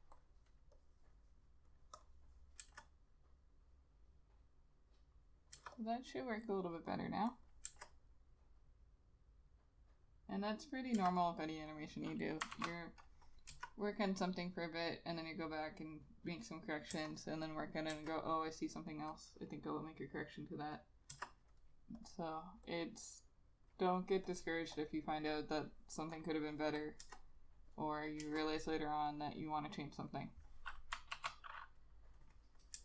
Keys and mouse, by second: 2.1 double click, 2.7 Return, 5.7 Return, 7.4 double click, 7.8 Return, 11.1 Return, 12.7 ctrl+s, 13.6 Return, 17.0 Return, 18.0 Return, 21.3 Return, 27.1 Return, 28.3 Return, 31.3 ctrl+s.